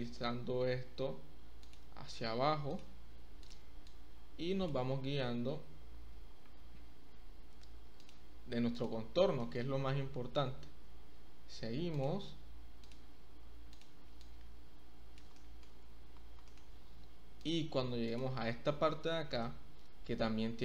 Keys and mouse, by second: 0.7 z, 1.6 click, 3.9 click, 8.0 click, 8.7 click, 9.3 shift+middle click, 10.5 e, 10.9 z, 11.9 click, 12.8 click, 14.2 click, 15.3 shift+middle click, 16.4 shift+middle click, 18.0 click, 19.1 e, 19.4 z.